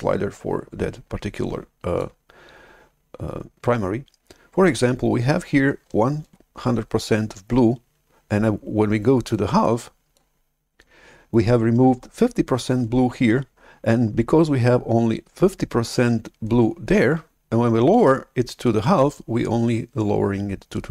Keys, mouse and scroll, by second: 9.2 click.